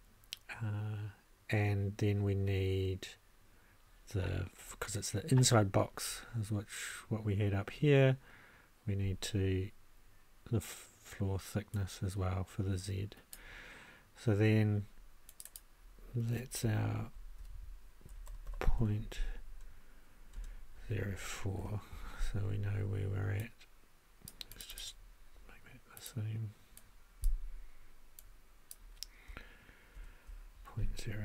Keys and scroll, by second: 17.0-19.3 typing, 20.3 space, 20.8 0, 21.1 4, 21.6 Return, 29.9 shift+p.